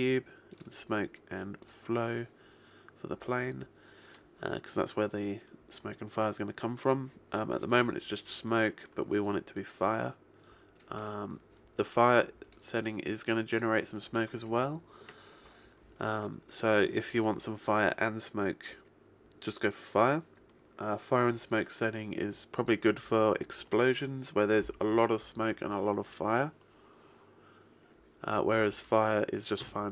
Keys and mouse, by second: 2.3 click, 8.5 click, 12.5 click.